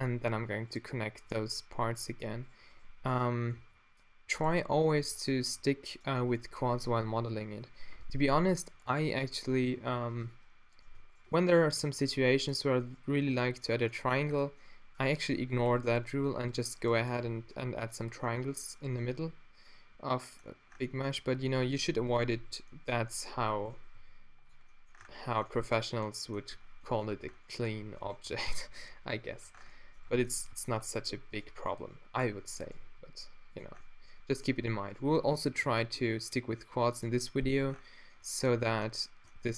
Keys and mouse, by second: 2.5 right click, 3.6 f, 5.0 f, 5.4 g, 6.3 drag, 6.5-8.2 middle drag, 8.9 right click, 9.6 click, 9.8 g, 10.0 click, 10.3-11.6 middle drag, 11.8 g, 12.5-13.5 middle drag, 13.2 g, 13.8-15.5 middle drag, 14.3 a, 15.5 ctrl+r, 16.0 click, 16.2 g, 17.2 d, 17.7 click, 18.4 drag, 19.1 g, 20.2 drag, 22.4 f, 23.9 g, 24.5-25.5 middle drag, 25.0 Tab, 27.1 Tab, 28.3 a, 28.5 b, 29.1 q, 29.4 Tab, 30.1 Tab, 32.5 f, 32.8 g, 33.8-34.5 middle drag, 34.9-35.6 middle drag, 35.6 g, 36.8 click, 37.6 Tab, 38.7 Tab.